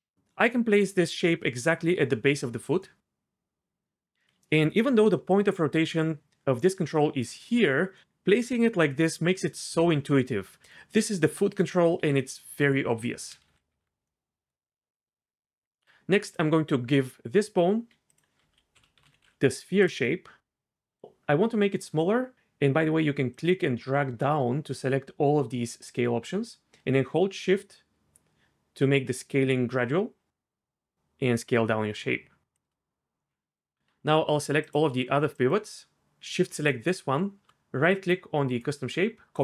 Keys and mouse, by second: 4.2-8.4 typing, 5.3 click, 10.6 r, 11.0 g, 12.0 r, 12.6 click, 13.7 alt+g, 16.2 click, 18.2-19.8 drag, 23.4-32.5 drag, 33.3 middle click.